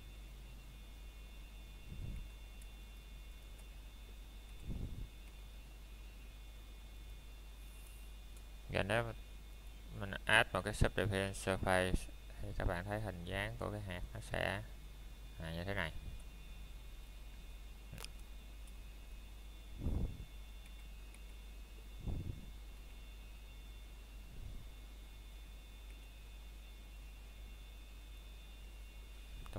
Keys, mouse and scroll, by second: 0.9 scroll down 1, 1.0 middle click, 1.3 scroll up 1, 2.1 middle click, 2.9 click, 4.8 s, 8.7 Escape, 11.2 ctrl+Tab, 13.1 Escape, 13.8 shift+click, 15.3 s, 17.5 click, 17.7 scroll down 1, 17.9 middle click, 18.2 scroll up 1, 18.4 shift+middle click, 19.4 click, 20.6 middle click, 23.9 click, 24.9 middle click, 25.2 scroll down 1, 25.7 middle click, 26.4 scroll down 1, 27.2 middle click, 27.7 scroll up 1, 28.1 middle click.